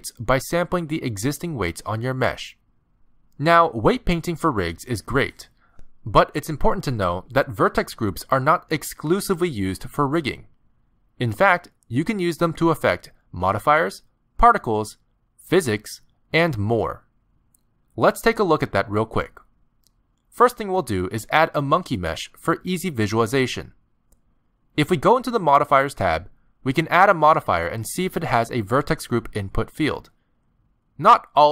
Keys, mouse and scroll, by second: 0.2 click, 2.4 click, 3.0 click, 22.1 click, 22.5 Delete, 23.0 click, 24.1 scroll up 5, 24.3 middle click, 25.1 right click, 26.4 click, 27.0 click, 30.2 click, 30.5 click.